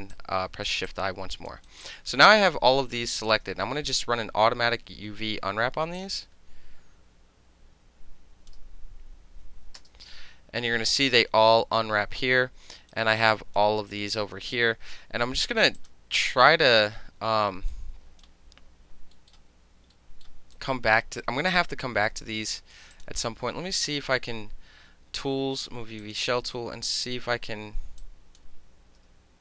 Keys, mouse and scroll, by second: 0.1 alt+click, 0.9 alt+click, 1.7 alt+right click, 1.8-3.3 alt+drag, 3.3-6.0 alt+middle drag, 3.7 space, 6.0-8.5 drag, 12.9 alt+right click, 14.1 alt+right click, 15.8 alt+click, 17.7-18.2 drag, 19.1 alt+middle click, 19.9 alt+middle click, 20.5 alt+right click, 22.9 click, 26.0 click, 26.5-27.0 drag, 28.0-28.4 shift+drag, 28.4-29.4 shift+middle drag.